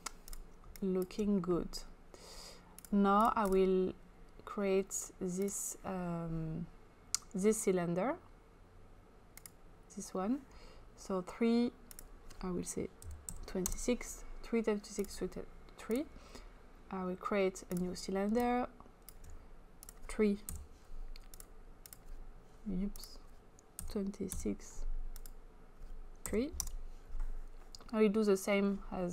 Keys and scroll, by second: 0.7 space, 12.8-13.7 typing, 20.5 3, 23.8-24.3 typing, 26.3 typing, 26.7 Return.